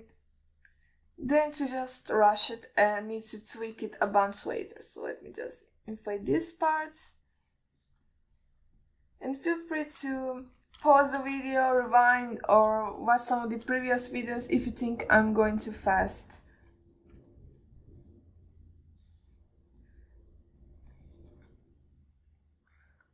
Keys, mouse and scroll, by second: 0.3 click, 0.7 alt+middle click, 1.4 click, 2.0 click, 2.4 click, 2.8 alt+middle click, 3.4 alt+shift+middle click, 3.9 middle click, 4.5 click, 5.2 alt+middle click, 5.5 ctrl+middle drag, 5.9 click, 6.3 click, 6.9 click, 7.2 click, 7.6 click, 8.2 alt+shift+middle click, 8.6 click, 9.1 click, 9.4 alt+middle click, 10.1 click, 10.5 click, 10.8 alt+middle click, 11.5 alt+shift+middle click, 12.3 shift+click, 12.8-13.2 middle drag, 13.5 click, 14.2 alt+shift+middle click, 15.2 shift+click, 16.6-17.4 drag, 17.7 ctrl+alt+middle click, 18.2 middle click, 18.6 ctrl+alt+middle click, 19.2 click, 19.7 click, 20.3 click, 21.4-22.3 drag, 22.4 ctrl+middle drag, 22.8-23.1 alt+middle drag.